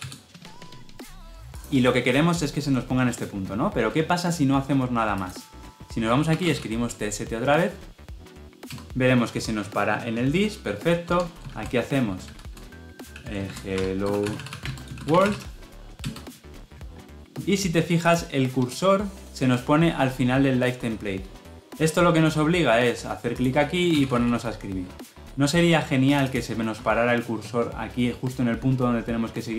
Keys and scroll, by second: 8.6 Return.